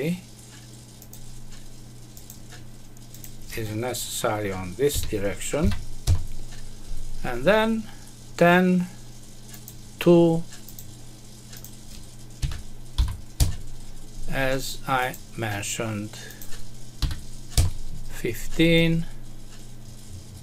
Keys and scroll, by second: 6.0 Return, 13.3 Return.